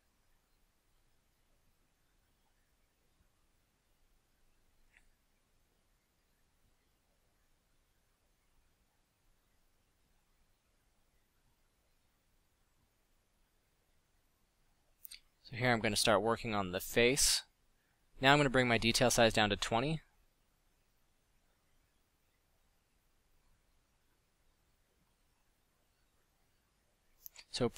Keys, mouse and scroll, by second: 1.5-2.1 drag, 5.9-8.2 middle drag, 8.8 KP_5, 9.3 KP_5, 9.4 KP_5, 12.4-13.0 middle drag, 13.7 f, 21.1 f.